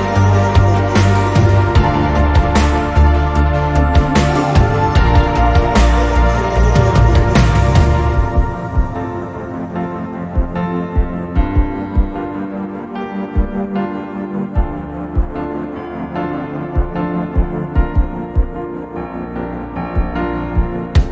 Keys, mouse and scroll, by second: 3.5 click, 7.1 ctrl+z, 7.4 ctrl+z, 9.2 ctrl+z, 11.9-12.3 shift+middle drag, 12.7 Tab, 14.9-16.3 right drag, 17.7 ctrl+z, 19.9-20.9 right drag.